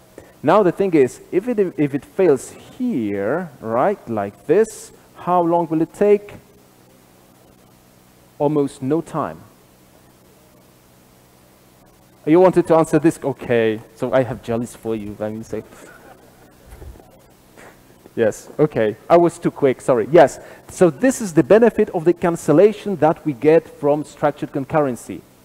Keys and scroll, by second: 1.2 super+b, 3.1 super+/, 5.7 ctrl+r, 5.7 shift+F10.